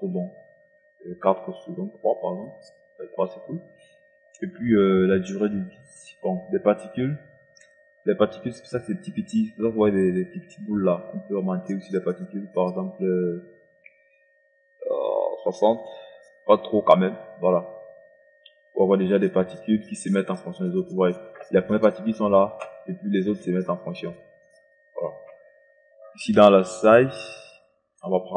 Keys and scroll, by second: 2.2 3, 15.1 KP_6.